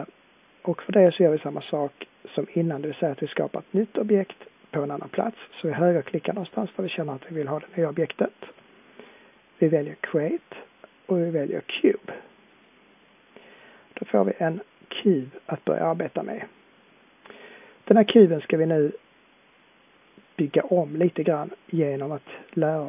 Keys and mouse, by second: 2.0 middle click, 2.3-12.5 middle drag, 14.0 click, 14.2-18.0 middle drag.